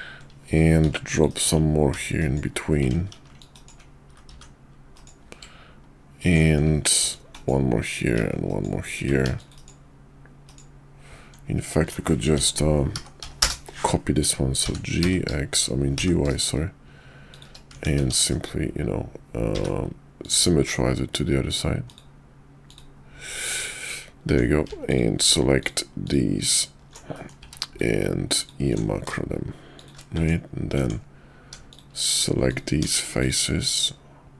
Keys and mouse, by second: 0.8 ctrl+r, 4.1 ctrl+r, 9.2 ctrl+e, 12.3 s, 14.6 g, 17.7 Tab, 18.1 alt+x, 21.5 click, 21.9 click, 22.7 click, 23.5 Tab, 24.3 Tab, 24.8 alt+click, 25.6-26.9 alt+shift+drag, 27.1 middle click, 27.4 q, 30.1 Tab, 30.7 Tab, 31.7 shift+click, 32.5 alt+click, 32.8 alt+shift+click, 33.2 alt+shift+click, 33.7 alt+shift+click.